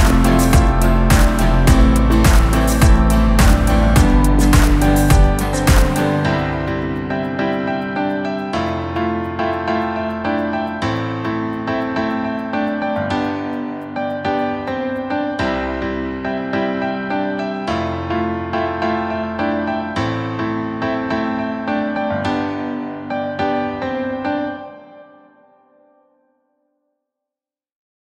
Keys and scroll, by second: 16.2 ctrl+g.